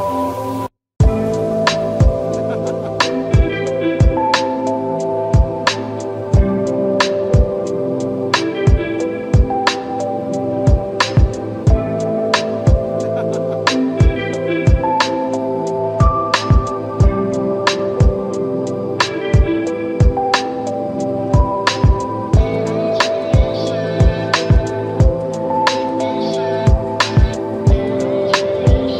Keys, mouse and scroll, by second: 0.1-3.0 drag, 4.9-5.3 scroll up 1, 5.3 scroll down 1, 5.8-6.2 scroll up 1, 6.2 click, 8.1-8.7 drag, 13.7 click, 14.9-15.8 drag, 19.9-22.2 drag, 27.3 click.